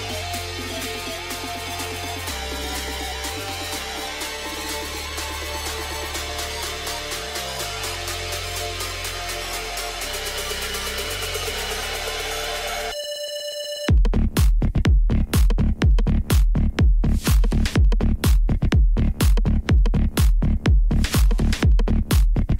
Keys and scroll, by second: 1.1 g, 2.7 Tab, 3.1 alt+a, 7.9 r, 9.7 r, 10.9 g, 10.9 z, 11.5 r, 12.9 r, 17.1-19.5 typing, 20.6 g, 20.7 z, 21.8 r.